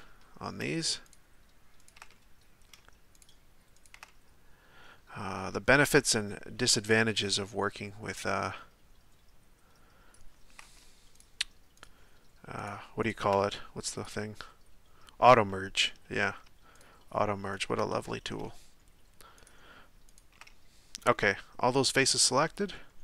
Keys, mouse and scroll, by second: 1.0 shift+right click, 1.8 shift+right click, 2.1-3.1 middle drag, 3.1 shift+right drag, 3.7 shift+right click, 4.1-8.4 middle drag, 8.4-11.1 drag, 11.1 shift+right click, 11.8 shift+right click, 12.6 shift+right click, 13.0 shift+right click, 15.5-16.8 middle drag, 16.8-17.6 shift+right drag, 17.8-19.4 middle drag, 19.4 shift+right drag, 20.1 shift+right click, 20.4-23.0 middle drag.